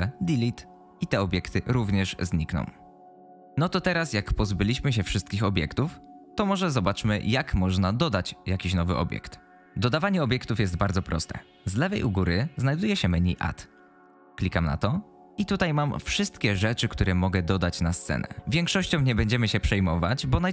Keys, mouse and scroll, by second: 14.2-20.5 drag.